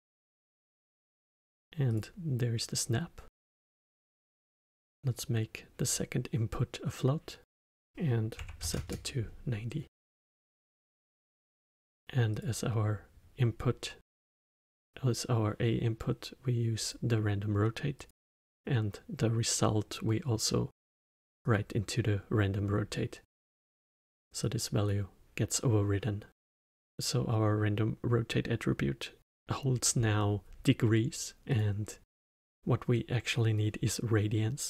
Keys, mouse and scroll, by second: 4.2-7.3 drag, 7.4-10.0 drag, 10.0-12.3 middle drag, 12.3-15.4 drag, 17.9-21.1 drag, 22.9-24.4 middle drag, 24.4 click, 25.5 click, 31.5 click.